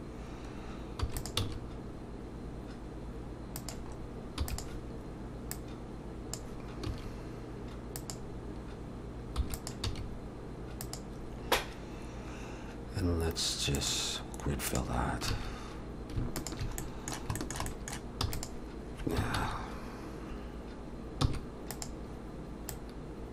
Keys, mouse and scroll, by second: 1.4 s, 5.5 click, 6.9 s, 9.4 e, 9.8 s, 13.8 click, 15.3 alt+a, 16.4 alt+shift+click, 16.8 middle click, 17.4 shift+middle click, 17.7 middle click, 18.2 e, 19.4 ctrl+z, 21.2 e, 22.7 click.